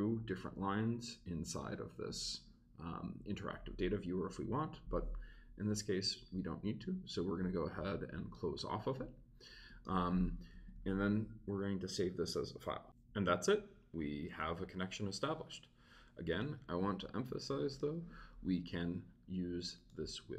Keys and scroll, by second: 10.5 Return, 10.7 super+s.